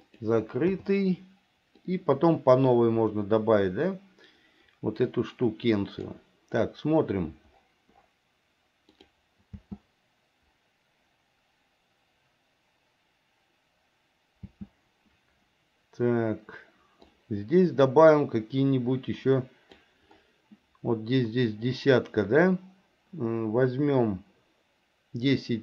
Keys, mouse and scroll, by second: 0.8 i, 2.0-6.2 drag, 9.1 click, 9.7 space, 14.6 space, 17.2-20.0 drag.